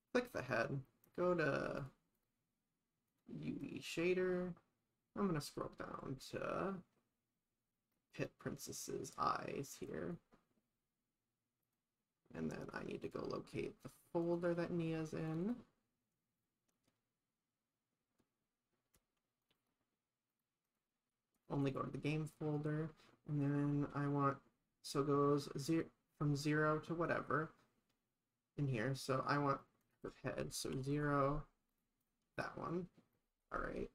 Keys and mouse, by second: 2.2 click, 3.2 click, 3.7 click, 9.9 click, 11.7 click, 13.1 click, 29.8-31.8 drag, 32.0 click.